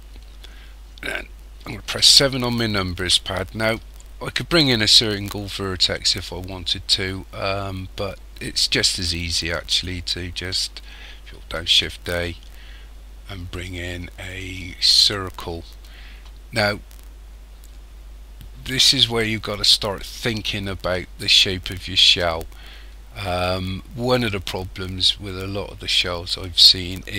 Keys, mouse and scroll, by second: 1.8 KP_7, 7.6 scroll up 1, 11.6 shift+a.